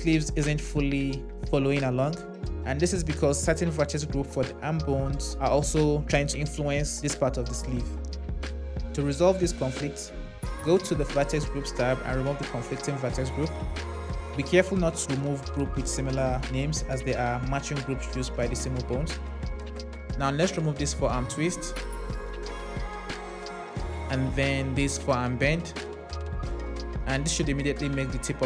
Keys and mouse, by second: 20.4 click, 21.9 click, 26.7 click.